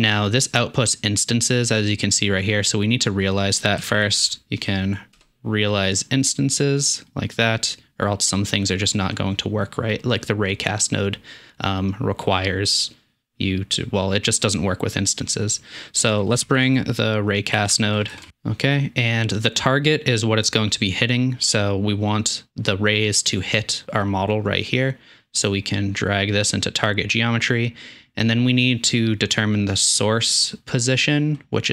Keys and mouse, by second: 6.8 drag, 16.0 shift+middle click, 16.4 shift+a, 18.1 BackSpace, 18.3 BackSpace, 24.7-31.7 drag.